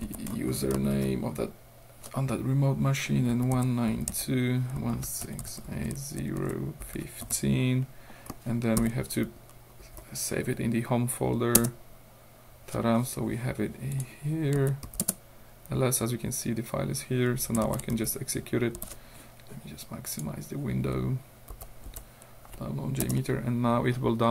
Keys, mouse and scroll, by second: 0.0-1.0 typing, 3.1-7.8 typing, 8.8 shift+ö, 11.6 Return, 13.9 click, 14.6 l, 14.9 s, 15.1 Return, 17.7 -, 18.0 d, 18.8 o, 20.2 click, 20.4 middle click, 21.5 w, 21.9 Tab, 23.1 Return.